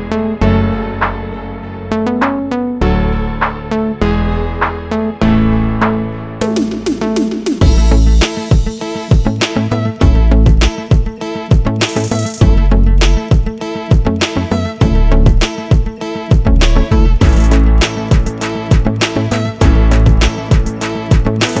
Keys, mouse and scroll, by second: 2.2 click, 3.6 3, 5.8 click, 9.0 7, 10.7 click, 12.4 3, 14.8 click, 17.8 shift+a, 19.9 click.